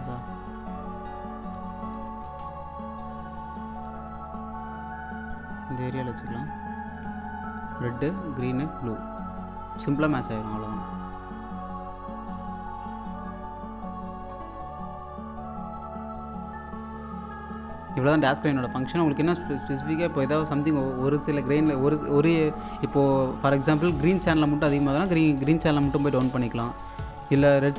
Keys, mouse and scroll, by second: 0.9-2.3 typing, 2.4-2.8 scroll down 1, 3.6-5.6 drag, 5.6 scroll up 1, 6.2 click, 7.0-8.9 typing, 9.8 scroll down 1, 10.2-13.3 drag, 13.3-13.6 scroll up 1, 14.0 click, 14.4-14.8 scroll down 1, 15.5 scroll down 1, 15.8-17.3 drag, 17.3-18.1 typing, 19.8-20.8 scroll up 1, 21.8 click, 24.0 g, 25.4-27.7 drag.